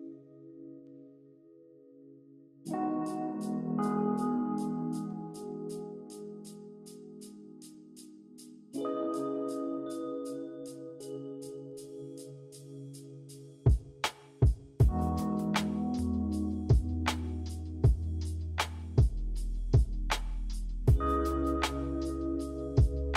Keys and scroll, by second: 2.6 v.